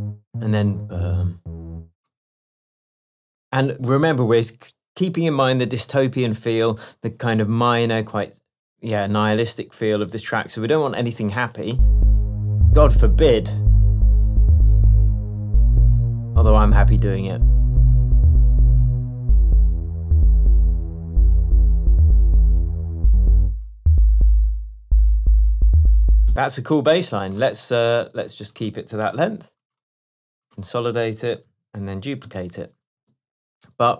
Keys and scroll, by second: 0.0 space, 11.8 space.